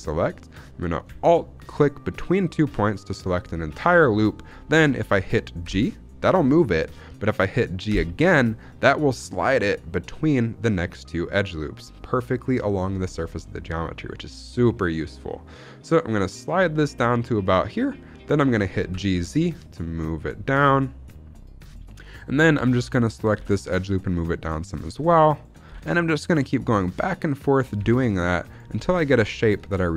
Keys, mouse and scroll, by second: 1.6 alt+click, 4.1-4.6 scroll down 1, 5.5 g, 7.8 g, 17.4 click, 18.7 g, 19.0 z, 22.0 click, 22.8 alt+click, 23.2 g, 23.3 z, 24.6 click, 25.2 alt+click, 25.5 g, 26.3 z, 26.7 click, 27.3 alt+click, 27.7 g, 28.1 z, 28.4 click, 28.6 scroll down 2, 28.8 z, 29.2 shift+middle click.